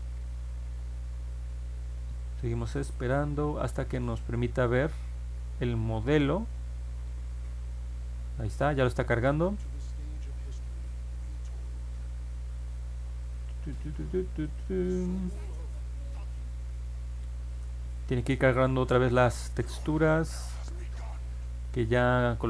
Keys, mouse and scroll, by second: 14.4 click.